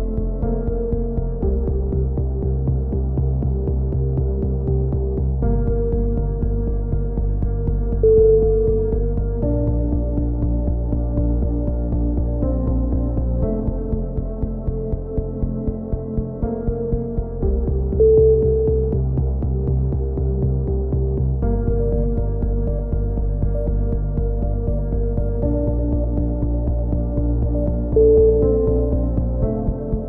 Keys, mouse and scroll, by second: 0.4 KP_3, 1.4 z, 5.0 click, 6.7 KP_3, 6.9 z, 7.6 z, 8.0 click, 8.6 KP_3, 9.7 z, 10.8 a, 11.3 c, 12.0 right click, 12.3 click, 14.7 a, 14.9 z, 15.2 middle click, 15.6-16.6 drag, 16.2 z, 16.6 middle click, 17.1 click, 18.2 c, 19.8 click, 20.1 z, 20.4 middle click, 20.8 click, 21.3 KP_3, 22.1 z, 23.1 a, 23.2 click, 23.2 c, 23.8 click, 24.7 click, 26.1 a, 26.3 z, 26.6 click, 27.5 click, 27.9 middle click, 28.5 click, 29.4 shift+d.